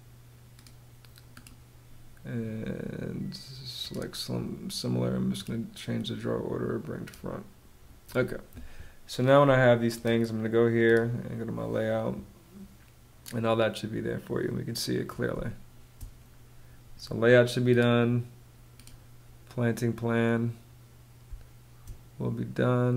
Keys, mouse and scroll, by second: 14.8 space, 20.7 space.